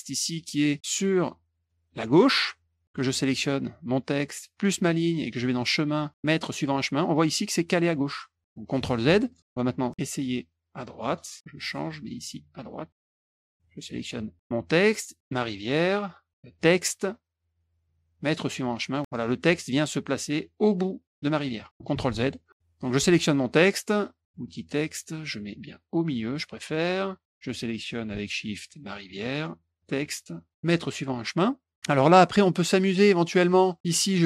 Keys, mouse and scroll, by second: 0.7 click, 0.8 click, 4.5 shift+click, 5.6 click, 6.5 click, 8.7 ctrl+z, 9.2 click, 9.5 click, 11.1 click, 11.5-12.5 drag, 12.9 click, 13.6 shift+click, 16.5 click, 16.9 click, 18.2 click, 21.9 ctrl+z, 22.2 click, 22.9 click, 24.4 click, 25.3-26.4 drag, 28.8 shift+click, 29.7 click, 30.6 click, 34.1 click.